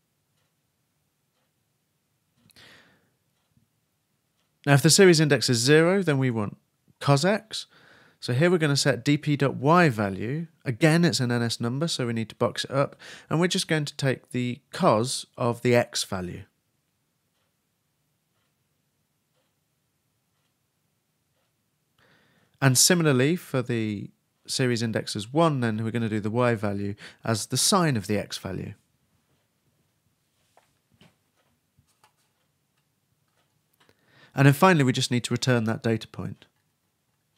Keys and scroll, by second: 2.4 shift+Right, 2.7 shift+space, 2.9 shift+[, 3.1 shift+Return, 10.7 shift+space, 10.8 shift+2, 11.1 shift+9, 18.3-20.7 typing, 22.6 shift+space, 22.6 shift+[, 23.1 shift+Return, 25.4-27.0 typing, 28.3 shift+n, 28.5 shift+Return, 29.8-31.9 typing.